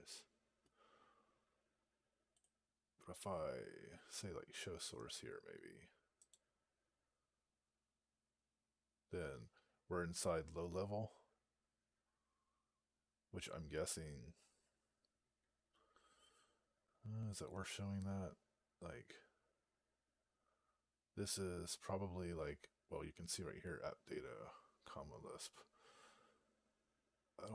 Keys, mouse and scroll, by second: 6.2 right click.